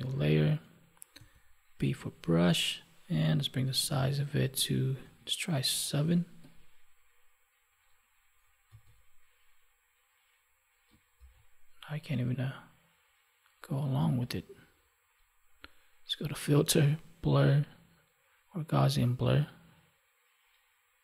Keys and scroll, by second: 8.6 ctrl+z, 11.1 ctrl+z.